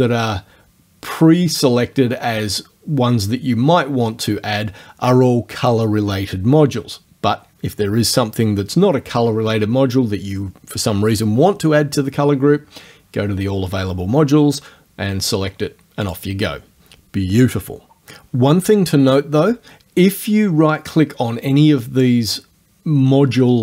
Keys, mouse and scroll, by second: 16.1 click, 20.8 right click.